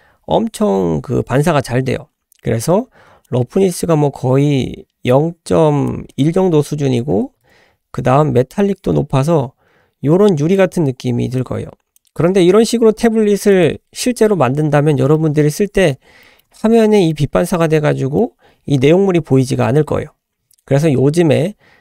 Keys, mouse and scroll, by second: 3.3-5.9 drag, 6.1-7.7 drag, 8.6-10.6 drag, 11.4 click, 12.0 middle click, 12.0 scroll down 2, 12.7-13.1 scroll up 2, 13.5 click, 15.0 scroll down 1, 15.2-16.0 middle drag, 16.6-17.1 middle drag, 17.5-18.2 middle drag, 19.0 scroll down 1, 19.5-20.1 scroll up 2, 20.1-20.6 scroll down 2.